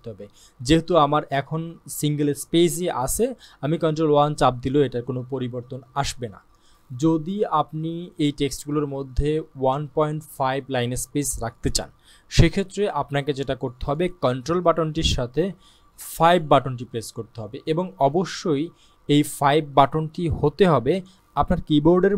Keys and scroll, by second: 16.3 ctrl+5.